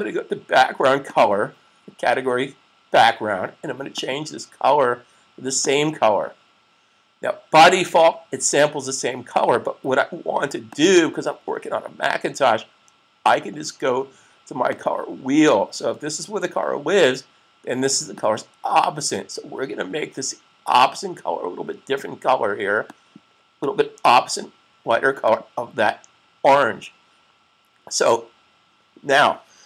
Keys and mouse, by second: 0.9 click, 3.7 click, 10.5 click, 14.4 click, 18.1 click, 22.8 click.